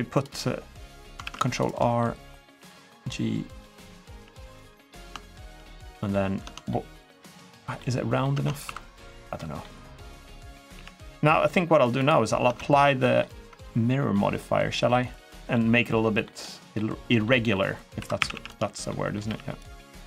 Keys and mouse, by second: 1.0 ctrl+r, 1.7 click, 2.3 g, 3.2 click, 3.5 middle click, 3.9 g, 4.2 click, 4.5 middle click, 5.2 shift+middle click, 5.6 middle click, 6.2 Tab, 6.4-6.8 middle drag, 7.0 middle drag, 7.5-8.0 middle drag, 8.1 Tab, 8.4 2, 9.1 middle click, 10.3 click, 10.5 g, 11.7 click, 12.2 Tab, 12.3-13.0 middle drag, 13.3 Tab, 13.9 middle click, 14.7 middle click, 15.3 middle click, 16.2 middle click, 16.8 middle click, 17.3 middle click, 17.7 2, 17.9 a, 18.1 a, 18.6 middle click, 19.0 g, 19.3 click.